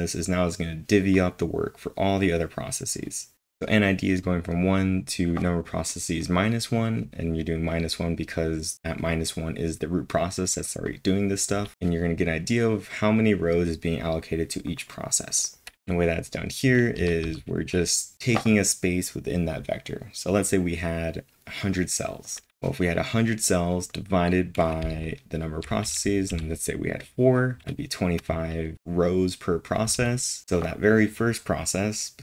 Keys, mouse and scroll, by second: 15.5-16.2 typing, 24.5-26.8 typing, 29.9-30.9 typing.